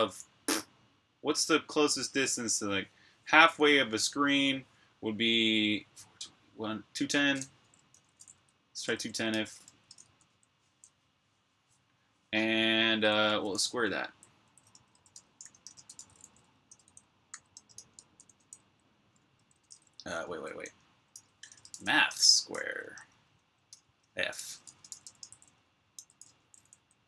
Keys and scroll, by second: 0.0-0.1 typing, 7.9-11.0 typing, 12.7-22.0 typing.